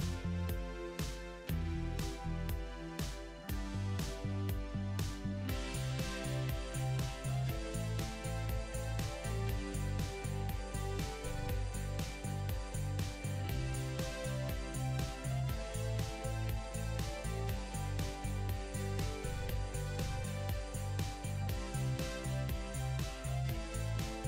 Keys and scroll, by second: 6.1 e, 6.4 d, 8.0 Down, 8.8 Return.